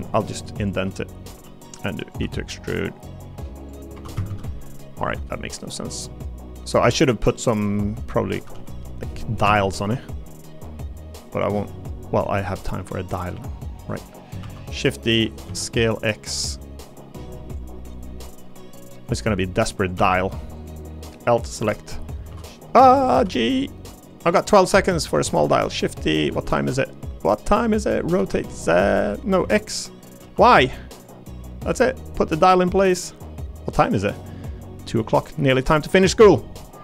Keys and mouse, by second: 2.2 e, 3.6 click, 3.9 3, 4.1 a, 4.3 a, 4.6 alt+click, 6.1 click, 8.3 a, 8.5 h, 9.4 g, 9.4 ctrl+z, 9.9 g, 11.3 click, 12.5 click, 13.9 click, 14.4 shift+d, 15.2 s, 15.5 x, 16.9 click, 18.0 click, 19.1 click, 19.5 click, 19.9 e, 21.6 l, 22.3 shift+d, 22.3 shift+f, 22.8 Escape, 23.1 g, 24.1 click, 25.3 shift+d, 26.3 s, 28.1 r, 28.3 z, 29.4 x, 30.2 y, 31.7-36.8 drag.